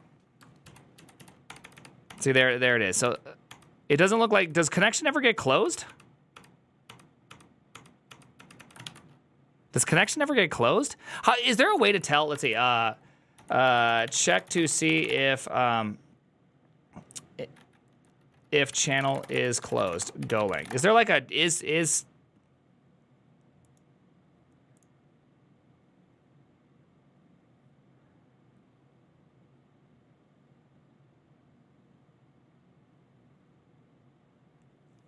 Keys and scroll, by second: 1.1 ctrl+u, 1.3 ctrl+d, 1.5 ctrl+d, 1.9 ctrl+d, 4.8 ctrl+d, 4.8 ctrl+u, 5.6 ctrl+d, 5.9 ctrl+d, 6.3 ctrl+d, 6.7 ctrl+d, 7.1 ctrl+d, 7.7 ctrl+d, 8.1 ctrl+d, 8.4 ctrl+d, 8.7 ctrl+d, 8.7 a, 9.8 ctrl+a, 10.0 1, 11.7 alt++, 12.3 ctrl+n, 13.2 ctrl+t, 13.7-15.4 typing, 19.3-21.0 typing, 23.0-23.7 typing.